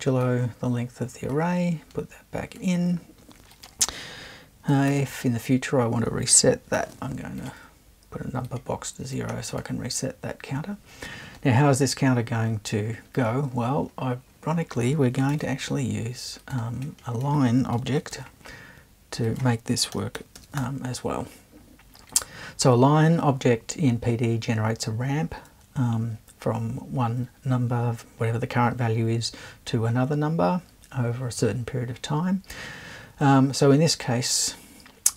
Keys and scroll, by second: 4.9 super+2, 6.7 0, 15.3 super+1, 15.3 super+2, 17.7 BackSpace, 18.1 super+1, 19.7-20.9 typing.